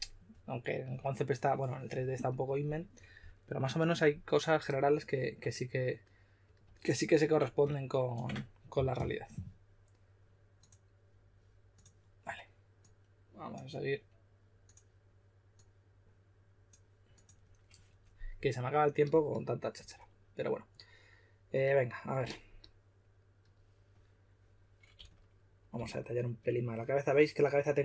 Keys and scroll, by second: 24.9-25.7 typing.